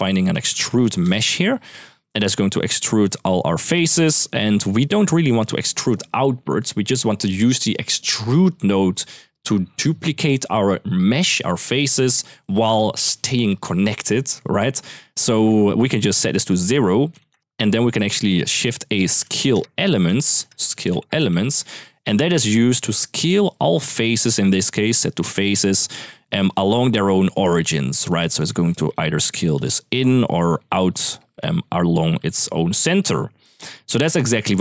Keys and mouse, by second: 1.5 click, 2.1-2.5 middle drag, 3.9 click, 16.0 click, 16.2 click, 18.2 shift+a, 19.9 Escape, 20.1 shift+a, 22.5 click, 23.6 middle click, 24.5-25.3 drag, 26.7-34.5 typing, 26.8 click, 28.1 click, 28.8 middle click, 29.4 click, 30.3 click.